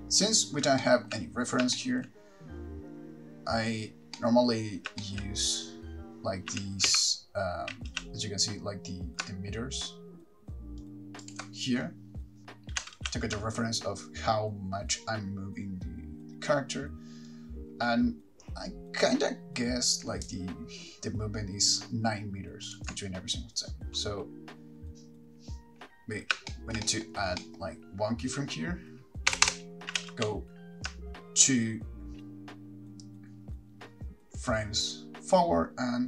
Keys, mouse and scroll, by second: 0.0 KP_3, 1.0 shift+middle click, 1.5-3.7 scroll up 3, 2.0 shift+middle click, 4.4 middle click, 4.8 scroll down 3, 5.2 shift+middle click, 6.7 g, 11.5 ctrl+right click, 23.1 ctrl+right click, 26.7 shift+middle click, 27.0 middle click, 27.6 middle click, 29.5 Right, 29.7 Right, 30.2 g.